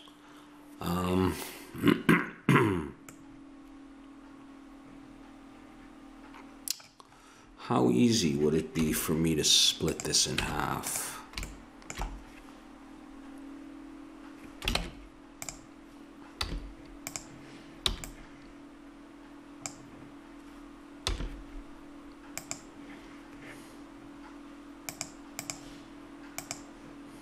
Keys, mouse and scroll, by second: 3.1-4.8 middle drag, 8.7 KP_1, 10.0-11.8 drag, 10.3 Tab, 14.8 ctrl+Tab, 16.4 z, 17.9 b, 21.1 x, 24.9-27.2 drag.